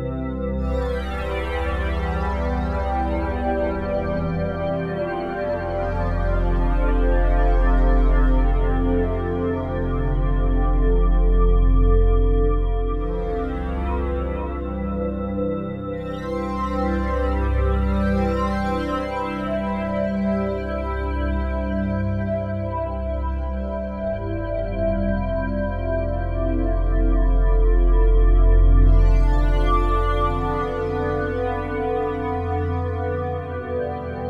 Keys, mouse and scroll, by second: 1.5 click, 5.8 click, 9.5 click, 14.6 ctrl+s, 18.0-23.1 ctrl+alt+drag, 26.0 super+d, 29.7 click, 31.3 click, 32.2-33.2 drag, 33.8 click.